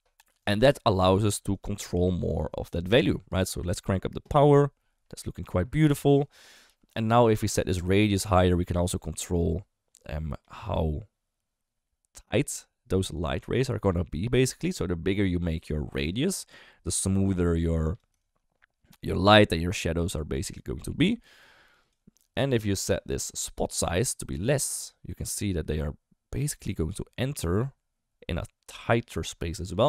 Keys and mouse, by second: 0.3-1.0 d, 0.4 right click, 1.5 click, 3.0-5.4 drag, 7.7-18.0 drag, 18.3-21.9 shift+drag, 23.7-29.8 drag.